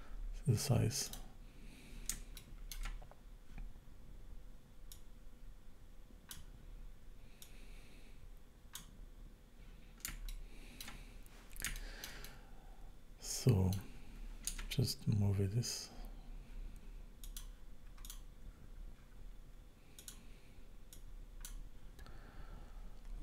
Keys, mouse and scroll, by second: 1.1 click, 1.5-2.1 scroll up 4, 2.4 shift+middle click, 4.9 click, 7.4 click, 10.3 shift+middle click, 11.2-11.7 scroll up 1, 11.8 shift+middle click, 12.2 middle click, 14.6 Tab, 17.3 click, 18.0 click, 18.6 scroll up 3, 19.0-19.5 scroll down 3, 20.0 click, 20.9 click.